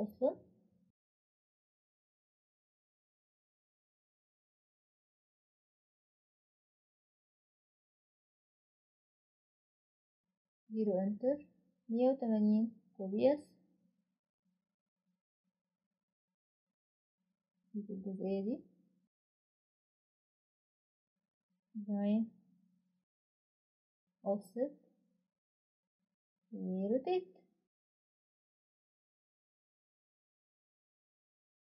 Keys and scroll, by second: 12.3 Return, 12.6-13.8 typing, 14.3 Escape, 21.0 typing, 23.1 typing, 28.7 Return, 28.7-31.2 typing, 30.1 Escape.